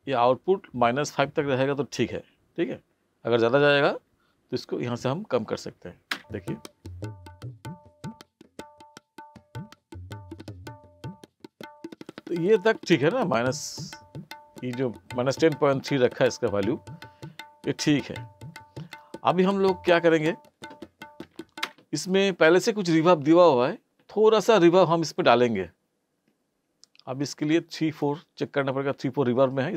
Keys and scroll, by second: 6.1 space, 21.6 space.